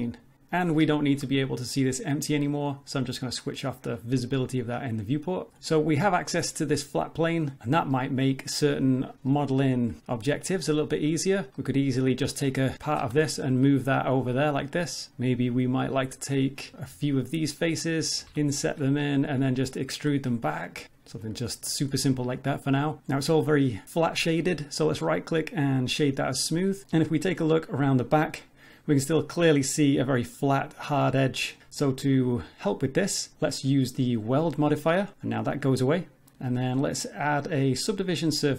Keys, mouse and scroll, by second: 0.4 scroll up 1, 0.9 shift+middle click, 3.3 click, 6.7 middle click, 7.9 middle click, 9.3 middle click, 10.6 click, 11.5 middle click, 13.0 g, 15.1 middle click, 15.5-16.0 scroll up 1, 16.0 click, 16.7 click, 16.7 3, 17.1 shift+click, 17.6 click, 17.8 click, 18.7 i, 19.0 middle click, 19.4 e, 20.5 middle click, 20.8 scroll up 1, 21.1 Tab, 22.1-23.0 scroll down 2, 25.0 right click, 29.9 middle click, 32.1 click, 36.9 click.